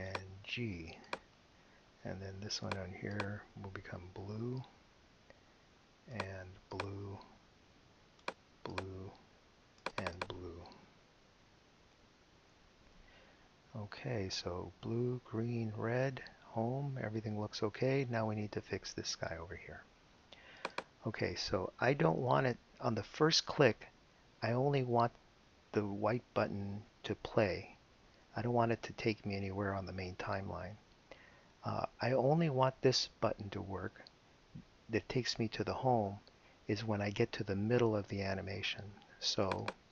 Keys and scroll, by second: 1.0 g, 4.3 b, 6.7 b, 8.7 b, 11.5-13.4 typing, 22.1 Return.